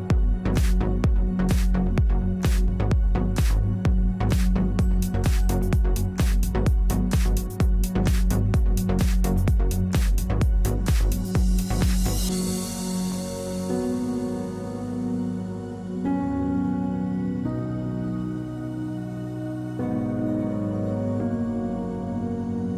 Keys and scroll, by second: 8.2 Delete, 16.9 ctrl+Delete.